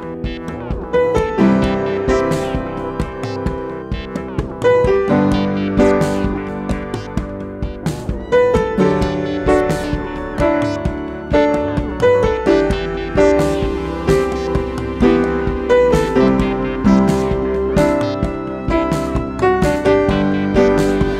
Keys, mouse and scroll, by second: 0.4-0.9 alt+scroll up 1, 2.5 click, 5.9-21.1 drag.